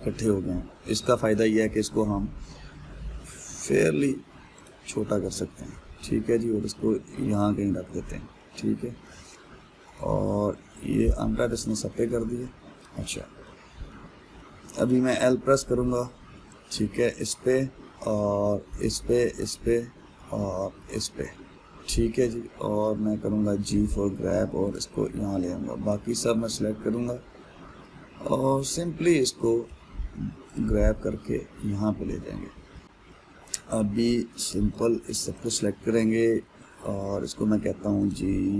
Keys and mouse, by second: 2.3 s, 6.4 g, 14.5-15.8 middle drag, 15.8 l, 16.5-19.4 middle drag, 19.4 l, 19.9 l, 20.3-21.4 middle drag, 21.4 l, 22.0-24.1 middle drag, 24.1 g, 26.5 click, 27.3-30.3 middle drag, 30.3 g, 32.0-34.7 middle drag, 34.7 click, 36.0 click.